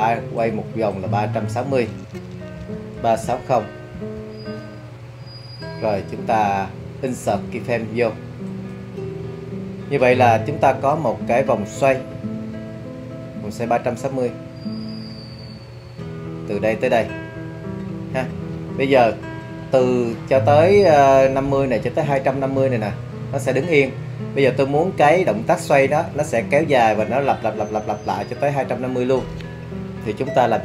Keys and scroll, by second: 2.3-3.7 typing, 3.9 Return.